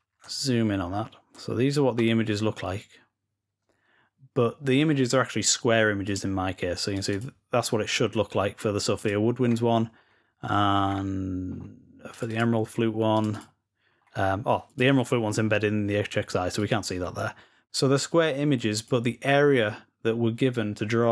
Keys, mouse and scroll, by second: 0.2-1.1 scroll up 2, 1.7-2.4 scroll up 2, 2.4-4.8 scroll up 1, 5.8 click, 6.4 click, 6.7 click, 6.9 click, 8.7-11.5 drag, 11.9-14.1 drag, 14.4-15.4 drag, 16.3 click, 18.7 click.